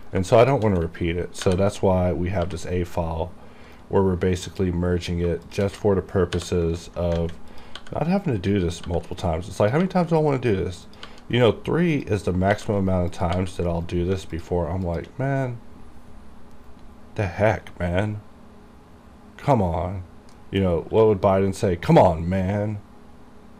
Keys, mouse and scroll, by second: 0.1 right click, 0.5 shift+click, 1.6 ctrl+j, 2.5 g, 3.8 right click, 4.5 click, 5.0-5.4 scroll up 1, 5.6 shift+click, 6.4 j, 7.1 scroll down 1, 7.3 alt+a, 7.6 click, 7.9 g, 8.2 right click, 8.6-9.0 scroll down 1, 9.0 g, 9.2 right click, 9.8 click, 9.9 g, 10.2 right click, 11.0 click, 11.2 g, 11.5 right click, 12.0 click, 12.6 g, 12.9 right click, 13.3 click, 13.5 g, 13.9 right click, 14.5 shift+click, 20.5-20.9 scroll down 1, 21.0 q.